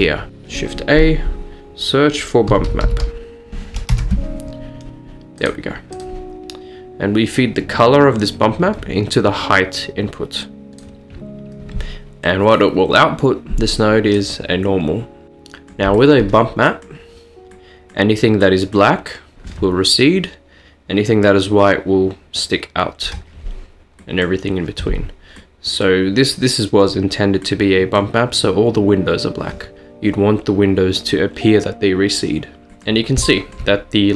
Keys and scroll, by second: 0.3 shift+a, 2.5-2.9 typing, 3.9 Return, 4.7-5.6 typing.